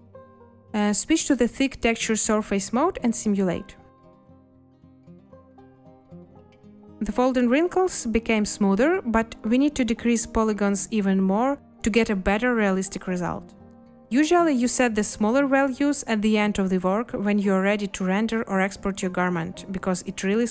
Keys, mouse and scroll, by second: 5.0 space, 9.4 space, 13.6 5, 13.8 Return, 17.0 space.